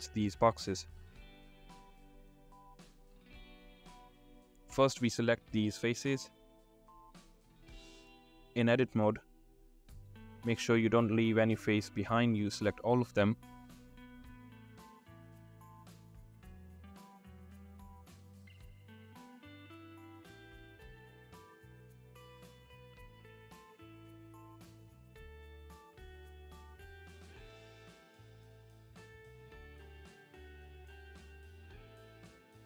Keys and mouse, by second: 5.2 shift+click, 6.5 shift+click, 7.3 middle click, 8.9 shift+click, 10.3 middle click, 11.4 middle click, 12.1 ctrl+click, 13.0 shift+click, 14.7 shift+click, 15.4 middle click, 15.7 click, 18.4 shift+click, 21.2 middle click, 22.2 shift+middle click, 22.9 shift+middle click, 24.1-25.1 middle drag, 29.9-30.9 middle drag, 31.9 middle click.